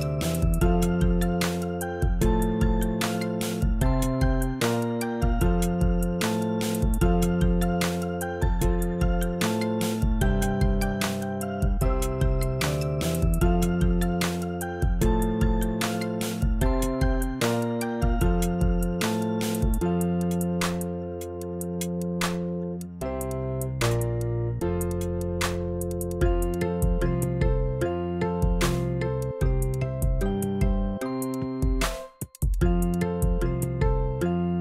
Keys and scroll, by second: 1.3 v, 4.8 shift+Down, 7.0 shift+Up, 18.1 z, 33.3 b.